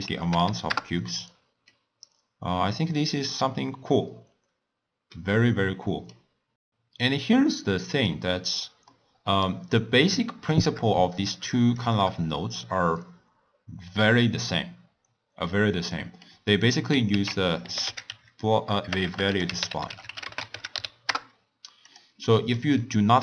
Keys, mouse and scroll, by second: 0.4 0, 1.6-4.7 middle drag, 6.1-6.4 scroll up 2, 6.4-7.7 scroll down 1, 7.7 middle click, 8.1-8.8 scroll up 3, 8.8-11.2 middle drag, 11.2 click, 11.7 shift+click, 16.2 middle click, 17.1 ctrl+a, 19.0 BackSpace, 19.1 BackSpace, 22.2-23.2 middle drag.